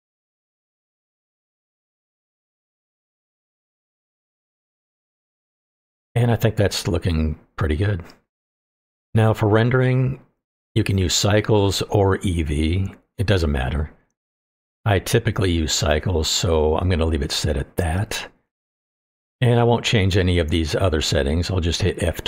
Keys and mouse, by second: 1.3 middle click, 2.2 click, 2.9-3.9 drag, 4.2-5.6 middle drag, 13.2-16.4 drag.